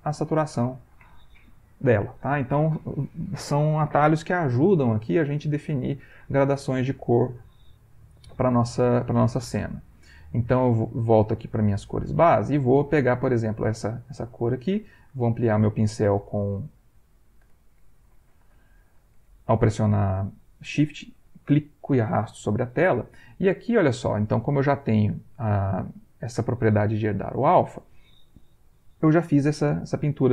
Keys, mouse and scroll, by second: 0.6 click, 0.6 ,, 6.9 middle click, 8.2 ctrl+middle click, 10.6 click, 13.2 ctrl+click, 13.8 ctrl+shift+click, 14.7-19.5 shift+drag.